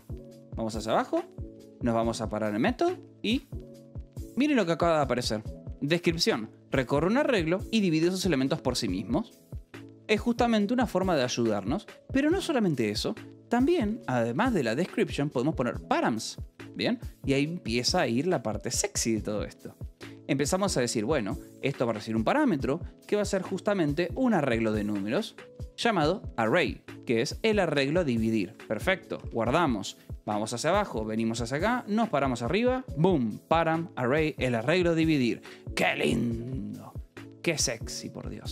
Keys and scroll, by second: 1.1 shift+g, 2.1 0, 3.8 shift+k, 12.2 k, 13.8 l, 14.3 space, 21.3 p, 21.6 m, 21.7 space, 24.7 Escape, 25.2 h, 26.8 l, 27.6 v, 28.3 e, 28.4 Escape, 29.6 ctrl+s, 30.7 shift+0, 32.6 shift+k, 36.3 Escape, 36.9 k, 38.2 j.